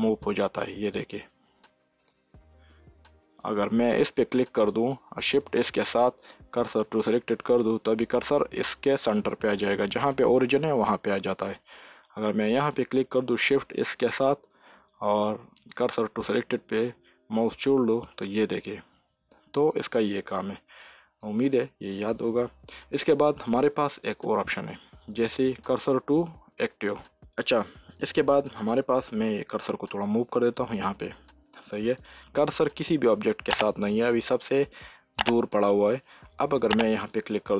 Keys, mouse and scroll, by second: 1.5-4.0 middle drag, 4.0 click, 5.4 shift+s, 9.7 middle click, 10.5-12.3 scroll up 1, 12.5 click, 13.8 shift+s, 19.0-24.1 middle drag, 24.1 shift+s, 27.5-29.8 middle drag, 29.8 click, 36.3 middle click, 37.2 click.